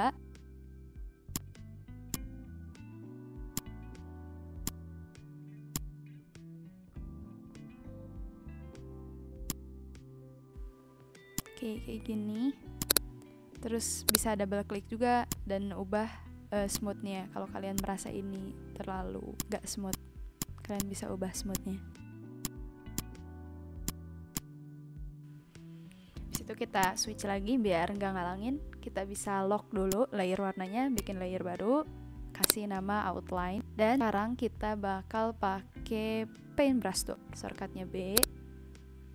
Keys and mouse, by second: 0.9 ctrl+z, 1.3 click, 2.1 click, 3.5 click, 4.6 click, 5.7 click, 7.9 click, 9.1 ctrl+z, 9.4 click, 11.3 click, 14.0 click, 15.2 click, 16.7 click, 17.7 click, 19.0 ctrl+z, 19.3 click, 22.4 click, 23.8 click, 26.3 click, 26.6 v, 26.8 click, 29.8 click, 30.9 click, 32.4 click, 33.1-33.8 typing, 36.5 b, 38.1 click.